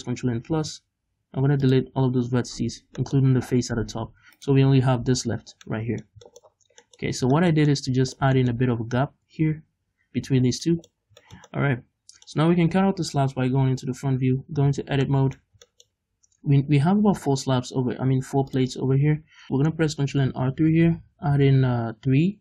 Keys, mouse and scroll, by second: 0.3 ctrl+KP_Add, 0.3 middle click, 1.2 x, 3.1 middle click, 3.8 Tab, 4.4 right click, 5.1 l, 5.6 scroll down 2, 5.7 middle click, 6.3 shift+middle click, 6.6-7.4 scroll up 4, 6.9 middle click, 7.4-13.7 shift+middle drag, 9.3 Tab, 10.5 scroll down 2, 11.1 scroll down 2, 13.7 KP_1, 14.4 Tab, 15.1 middle click, 15.7 shift+middle click, 18.6 click, 19.3 scroll up 1, 19.4 middle click, 20.1 ctrl+r.